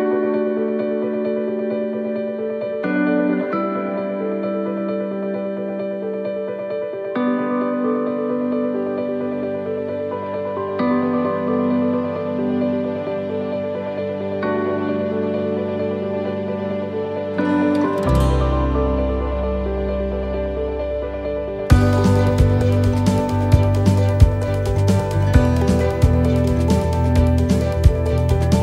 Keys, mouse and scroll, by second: 0.0 right click, 0.8 shift+right click, 1.7 f, 2.1 middle click, 3.1 right click, 3.9 shift+right click, 4.9 f, 5.2 middle click, 5.6 scroll down 1, 6.1 middle click, 6.4 scroll down 1, 7.0 shift+middle click, 7.6 scroll up 2, 8.0 shift+middle click, 9.6 ctrl+r, 11.2 ctrl+r, 13.2 ctrl+r, 14.4 scroll down 3, 15.2 ctrl+r, 17.3 middle click, 17.6 scroll up 2, 18.3 shift+middle click, 19.5 click, 20.1 right click, 20.7 shift+right click, 21.3 shift+right click, 21.5 right click, 22.4 shift+right click, 23.0 right click, 27.6 middle click.